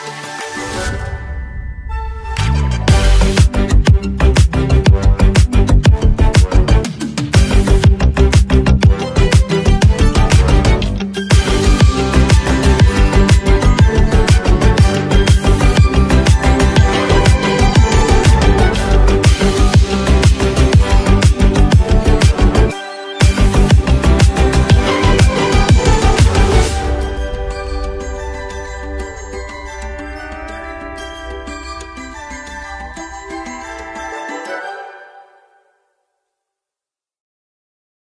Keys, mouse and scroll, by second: 7.0 click, 9.2 typing, 10.6 click, 10.6 typing, 19.9-28.0 drag, 19.9 typing, 28.0-33.2 drag.